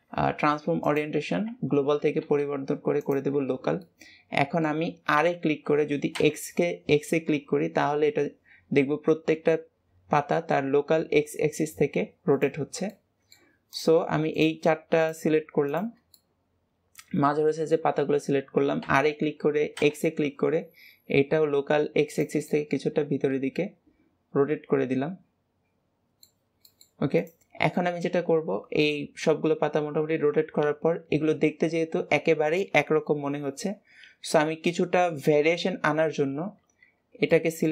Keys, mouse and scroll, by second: 3.7-5.0 middle drag, 5.0 r, 12.5 scroll down 2, 12.8-13.6 middle drag, 13.6 click, 14.2 shift+click, 14.8 shift+click, 15.5 shift+click, 16.0-18.6 middle drag, 18.6 r, 22.4-25.4 middle drag, 26.1 middle click, 26.2 scroll down 2, 26.5-27.0 middle drag, 27.0 click, 27.6-30.8 middle drag, 31.3-34.4 scroll up 2.